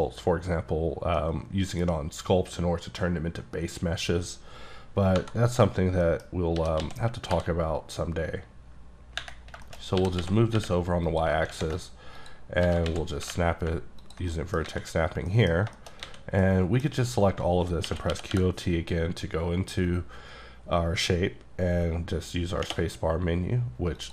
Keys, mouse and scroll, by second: 1.2 middle click, 5.2 KP_Divide, 6.1 middle click, 6.3 scroll down 2, 6.6 g, 6.8 x, 7.3 y, 9.4 scroll down 4, 9.7 shift+middle click, 10.0 g, 10.2 x, 10.6 y, 11.1 click, 11.5 ctrl+shift+Tab, 12.2 click, 12.6 g, 12.9 x, 13.2 y, 14.0 ctrl+click, 14.3 ctrl+middle click, 14.9 a, 14.9-15.3 scroll up 2, 15.3 middle click, 15.6 scroll down 2, 15.8 shift+middle click, 16.0 a, 16.1-16.4 scroll up 1, 16.4 middle click, 17.9-18.3 typing, 20.4 q, 24.0 click.